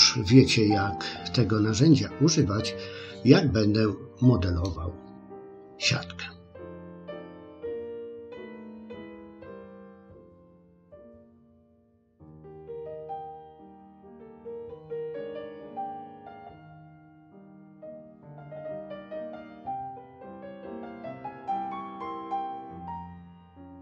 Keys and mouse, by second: 2.7-4.6 middle drag, 6.9 click, 7.5 click, 7.8 middle click, 8.2 middle click, 8.7 click, 9.7 click, 10.2 click, 10.5 click, 11.2 middle click, 12.4 click, 13.2 click, 13.7 click, 14.3 ctrl+r, 15.4 click, 15.7 click, 16.0 click, 16.4 click, 16.9 middle click, 17.5 click, 18.2 middle click, 19.1 click, 20.0 middle click, 20.5 click, 21.2 middle click, 21.8 ctrl+r, 22.9 click, 23.3 click, 23.5 middle click.